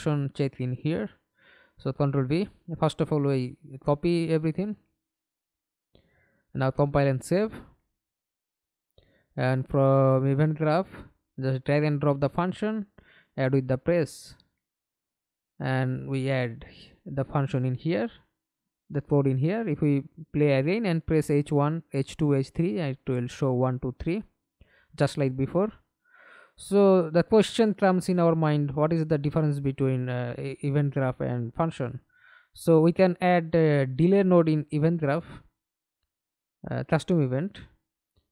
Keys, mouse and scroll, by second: 0.7 double click, 1.0 right click, 2.4 ctrl+v, 8.1 right click, 11.2 double click, 12.0-12.6 scroll up 1, 12.6-15.3 scroll up 1, 15.3 double click, 18.0 middle click, 18.7 F11, 19.3 alt+p, 21.2 h, 21.8 h, 22.3 h, 23.7 Escape, 23.9 middle click, 24.7 F11, 28.6 right click, 29.8 right click, 30.7-31.8 typing, 32.2 Return, 33.1 right click, 35.6 Delete, 37.2 double click, 38.2 right click.